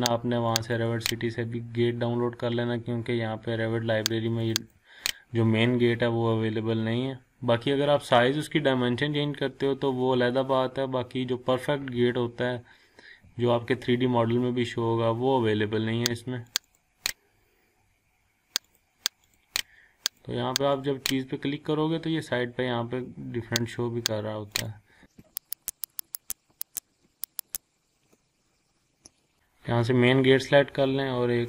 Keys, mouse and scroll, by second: 0.9 click, 4.4 click, 16.5 click, 23.6 click, 26.7 ctrl+click, 27.3 click, 29.3 click.